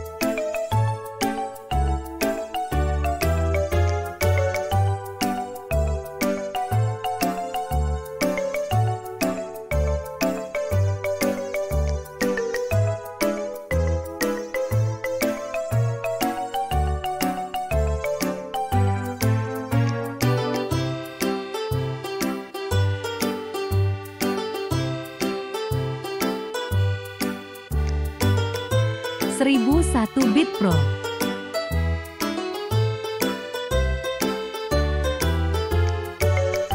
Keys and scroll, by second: 0.7 ,, 1.2 m, 2.3 typing, 4.8 space, 14.2 e, 16.6 space, 22.9 r, 25.3 space.